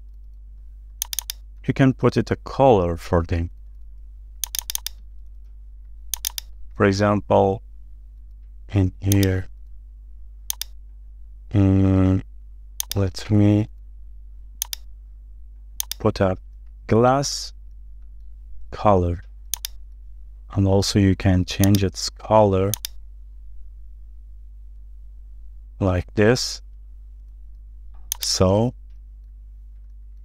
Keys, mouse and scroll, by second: 0.0 scroll down 1, 0.8 ctrl+z, 1.2 double click, 1.5-1.9 scroll up 1, 2.0 shift+middle click, 4.6 double click, 6.2 shift+click, 6.3 shift+double click, 7.1 scroll down 1, 7.4 shift+middle click, 17.5 shift+middle click, 18.3 scroll up 1, 18.7 shift+middle click, 20.4 middle click, 27.7 space, 28.5 middle click, 29.4-29.9 scroll down 1, 29.9 middle click.